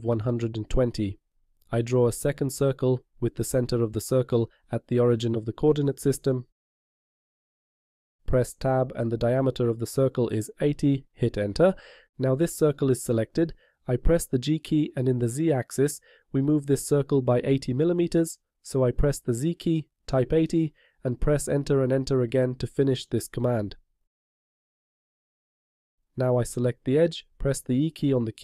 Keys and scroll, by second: 8.7 Tab, 15.4 g, 18.9 z.